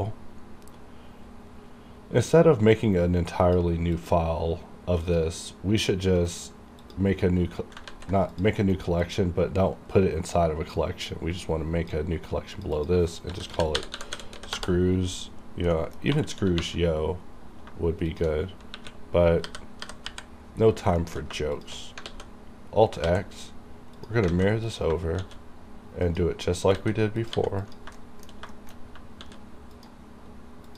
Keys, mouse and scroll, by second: 2.3 click, 6.3 right click, 6.9 click, 8.0 ctrl+z, 8.4 click, 8.4 click, 8.7 right click, 9.1-12.6 drag, 12.6 click, 12.8 click, 13.4-14.5 typing, 14.6 Return, 15.8 middle click, 16.2 2, 17.8-18.8 typing, 18.2 shift+click, 20.1 KP_Decimal, 20.7 scroll down 1, 21.1 shift+middle click, 21.6 shift+click, 22.1 alt+x, 24.1 click, 24.4 alt+a, 24.7 click, 25.3 shift+d, 26.1 click, 26.8 click, 26.9 s, 27.3 click, 27.3 click, 27.4 g, 27.7 click, 28.1 shift+middle click, 28.6 shift+middle click, 28.8 scroll down 3, 29.3 shift+d, 29.8 click.